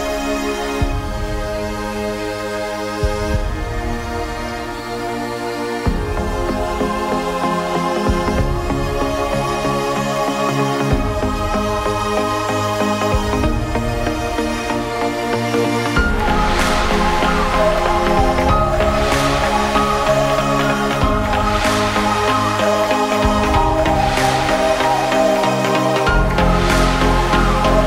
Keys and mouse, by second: 0.0-2.5 typing, 0.0 ctrl+z, 0.9-1.6 drag, 1.8 alt+h, 4.0 l, 6.4-7.5 right drag, 7.7-10.2 right drag, 10.3 a, 10.4 Tab, 10.6 Tab, 11.3 a, 12.0 l, 12.6 g, 13.0 Tab, 13.0 z, 14.0 s, 14.6 Tab, 14.6 z, 16.4 Delete, 17.9 Delete, 18.4 l, 18.5 h, 19.1 right click, 19.4 f, 21.0 a, 23.0 a, 23.7 a, 24.9 Delete, 26.0 Tab, 26.3 alt+h, 26.4 a, 26.7 l.